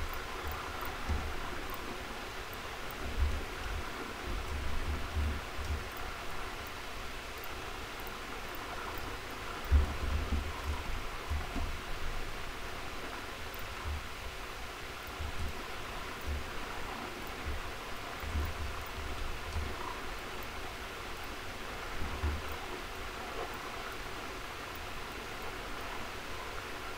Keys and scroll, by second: 1.0 ctrl+v, 3.4 ctrl+shift+,, 4.7 ctrl+b, 9.8 ctrl+shift+,, 18.2 ctrl+c, 18.9 ctrl+a, 19.4 ctrl+v, 20.8 ctrl+v, 22.1 ctrl+b.